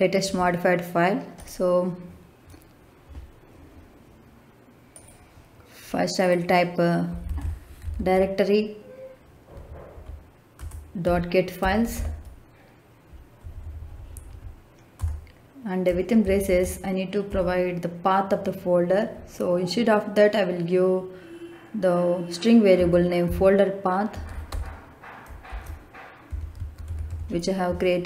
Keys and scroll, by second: 7.2 d, 7.3 i, 7.7 r, 7.8 e, 9.4 Down, 10.5 Return, 11.0 ., 11.5 g, 11.7 e, 11.8 t, 13.3 Down, 14.9 Return, 16.1 shift+9, 16.4 shift+0, 17.2 Left, 22.7-24.4 typing, 25.4-27.0 typing.